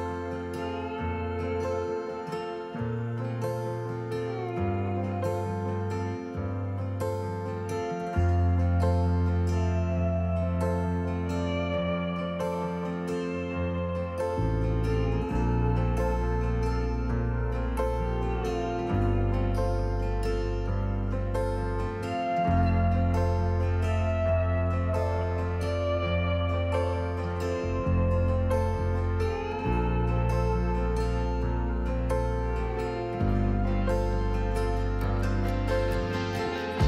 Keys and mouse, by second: 0.9 click, 3.3 click, 4.3 click, 7.4-21.3 drag, 24.0 Tab, 28.4-29.9 drag, 31.1-31.7 middle drag, 33.1-34.4 drag, 35.3-36.8 drag.